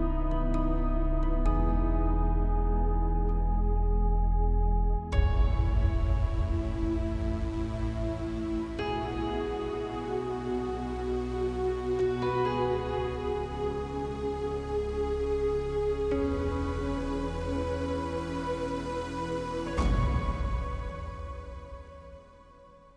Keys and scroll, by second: 0.9 l, 3.0 space, 4.7 ctrl+q, 7.1-11.0 typing, 16.8 Return, 17.6 space, 22.4 m.